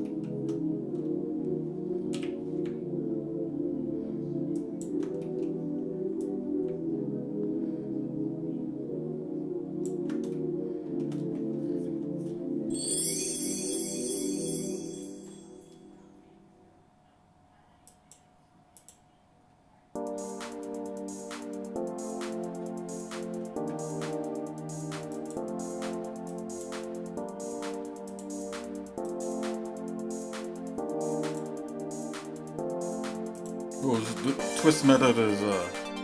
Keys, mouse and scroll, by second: 0.0 shift+middle click, 0.9 scroll up 2, 2.1 g, 5.2 middle click, 6.2-9.9 drag, 10.3 shift+middle click, 17.9 click, 18.9 click, 25.2-26.7 drag, 28.2-29.3 drag, 31.4-33.4 drag, 34.9-36.0 drag.